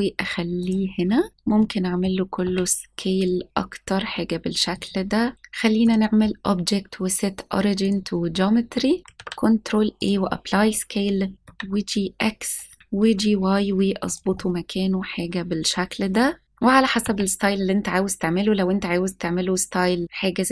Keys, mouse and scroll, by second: 0.5 click, 0.9 scroll up 1, 1.3 scroll down 2, 1.5-2.0 middle drag, 2.2 s, 4.6 click, 5.8-7.9 drag, 9.1 ctrl+a, 11.3 g, 11.3 y, 12.8 right click, 12.8 g, 12.8 y, 14.0 click, 14.3-16.4 middle drag, 16.4 r.